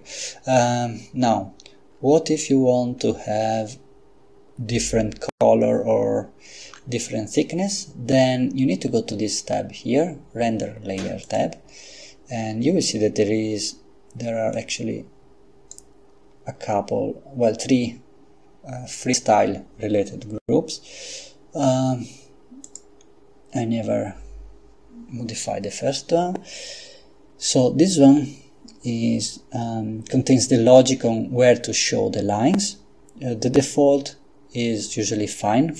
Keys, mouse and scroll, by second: 6.6 Escape, 11.3 click, 14.6-16.2 drag, 22.6 click.